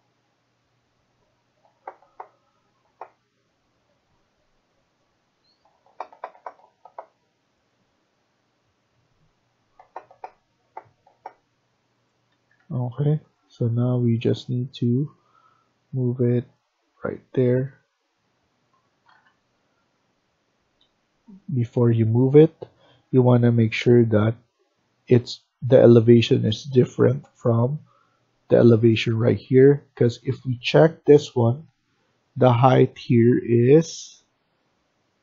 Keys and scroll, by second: 12.2 Escape, 12.5 Escape, 12.7 Escape, 17.5 Escape, 19.0 ctrl+z, 20.5 Escape, 20.7 Escape, 31.1 Right, 31.3 Right, 31.7 Right, 32.0 Right.